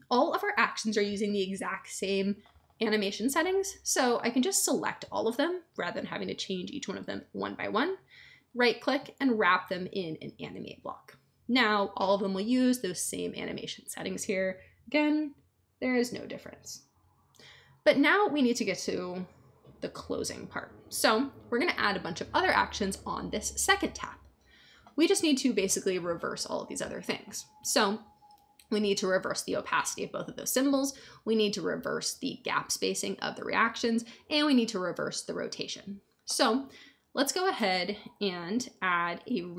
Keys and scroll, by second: 38.9-39.5 typing.